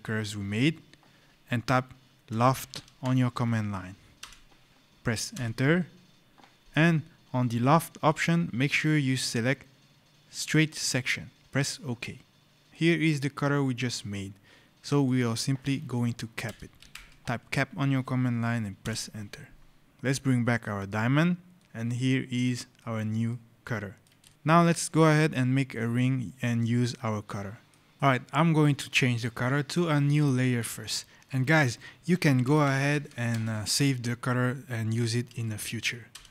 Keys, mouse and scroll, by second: 2.1 l, 2.5 f, 4.1 Return, 5.2 Return, 7.3 click, 10.4 click, 16.3 c, 16.7 p, 18.7 Return, 19.8 click, 21.4 right click, 22.7 scroll, 23.2 right click, 23.3 middle click, 23.3 scroll, 24.1 middle click, 25.9 right click, 26.5 scroll, 27.1 right click, 27.9 click, 30.3 click, 31.7-33.8 typing, 35.2 space, 36.0 Return.